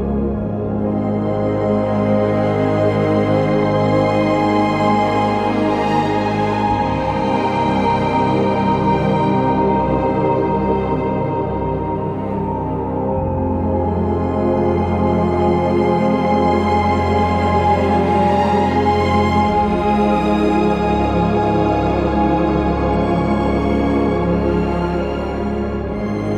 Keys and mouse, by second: 1.1 g, 1.4 x, 5.2 click, 6.4 ctrl+b, 13.4 Escape, 18.3 click, 23.3 click, 24.3 click, 25.7 Tab.